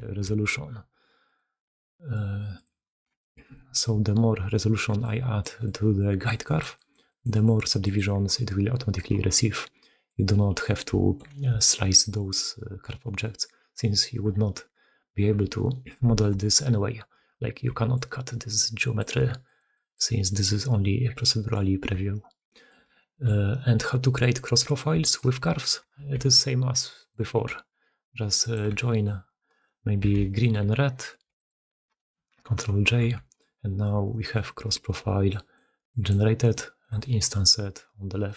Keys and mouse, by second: 1.2-2.9 drag, 3.0 shift+drag, 3.2 middle click, 3.4 click, 4.7-8.8 typing, 5.3 click, 6.2 click, 6.5 click, 6.8 click, 7.1 click, 7.3 click, 7.6 click, 8.1-8.8 drag, 9.7 drag, 10.5 click, 10.8 shift+drag, 11.4 alt+click, 14.1 Tab, 15.3 Tab, 15.6 middle drag, 16.0 shift+middle drag, 17.5-20.5 typing, 21.9 Tab, 22.4 middle drag, 22.8-23.2 shift+middle drag, 23.8 middle drag, 24.8 shift+middle drag, 25.4 middle click, 25.9 shift+d, 27.4 r, 28.9 shift+click, 29.4 click, 30.1-30.5 alt+shift+drag, 31.7-33.1 middle drag, 32.6 ctrl+j, 33.2-33.9 middle drag, 34.0 middle click, 34.4-35.1 middle drag, 34.8 d, 35.0 d, 35.1-36.3 d, 36.7 d, 38.1-38.3 middle drag.